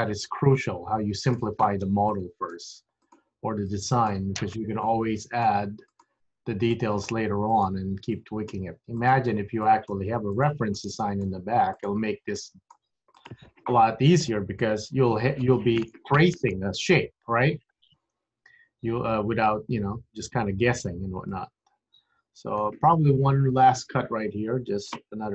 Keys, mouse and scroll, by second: 2.1 click, 2.7 g, 3.8 click, 4.3 g, 5.3 click, 5.6 g, 6.8 click, 7.3 g, 8.3 click, 8.7 g, 9.7 click, 10.0 g, 11.0 click, 11.4 g, 12.4 click, 12.8 g, 13.8-14.3 scroll down 5, 14.9 KP_3, 16.0-16.4 scroll down 2, 19.4-19.8 scroll up 3, 21.0 scroll up 2, 21.4 middle click, 23.7 click.